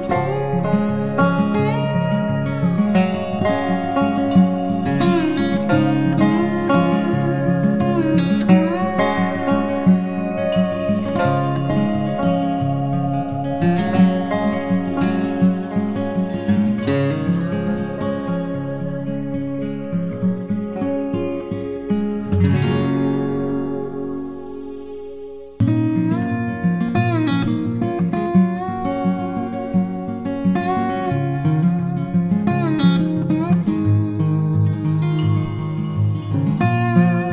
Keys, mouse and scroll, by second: 19.0 ctrl+t, 20.0 alt+shift+click, 24.1 alt+shift+click, 30.6 alt+shift+click.